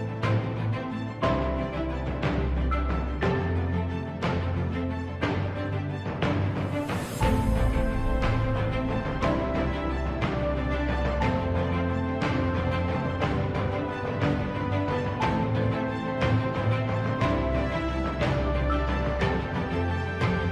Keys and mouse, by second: 0.7 click, 2.2 f, 3.4 click, 4.6 KP_3, 8.4 KP_1, 10.1 shift+middle click, 14.6 ctrl+right click, 16.3 s, 19.8 ctrl+right click.